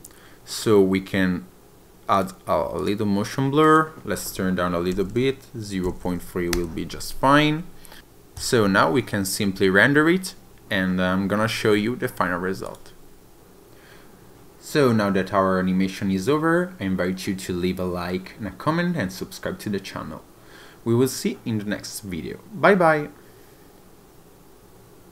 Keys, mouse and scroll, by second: 0.6 click, 2.2 click, 2.8 click, 3.7 click, 8.4 click, 12.7 click.